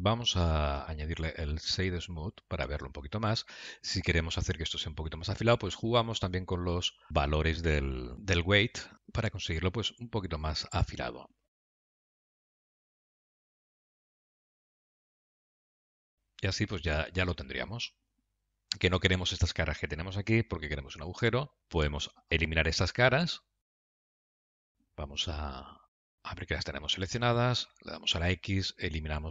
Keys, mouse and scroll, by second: 0.8 right click, 2.7 middle click, 4.2 scroll up 2, 4.9 middle click, 4.9-5.3 scroll up 2, 6.6 Tab, 7.4 click, 9.5 q, 11.3 shift+click, 11.6 q, 12.8 shift+click, 16.2 scroll down 2, 16.9 middle click, 16.9-17.3 scroll down 3, 22.1 scroll up 2, 23.7 scroll up 1, 23.7 3, 23.8 click, 24.3 middle click, 26.9 shift+z, 27.8 middle click.